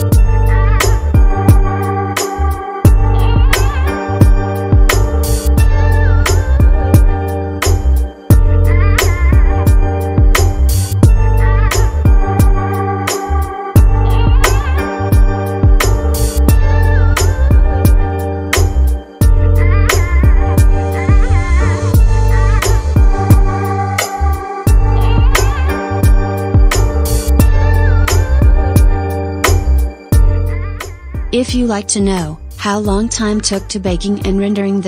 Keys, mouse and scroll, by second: 1.3 middle click, 2.1-5.6 drag, 5.7-8.2 drag, 13.1-13.6 drag, 14.2-17.5 drag, 17.5-18.1 scroll down 1, 18.1-22.6 scroll down 22, 22.6-25.6 drag, 26.7-29.5 scroll down 4, 31.0 click, 31.6-34.8 drag.